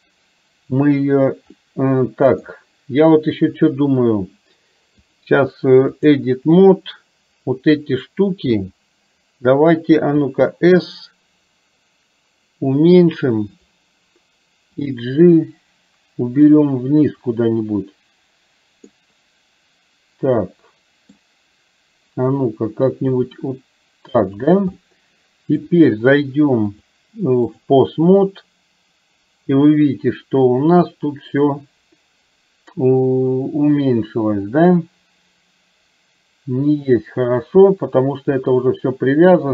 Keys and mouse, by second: 1.6-2.6 middle drag, 5.2-6.2 drag, 8.6 KP_3, 10.2 s, 15.1-16.6 drag, 19.0-21.2 middle drag, 24.8 middle click, 26.8-28.1 drag.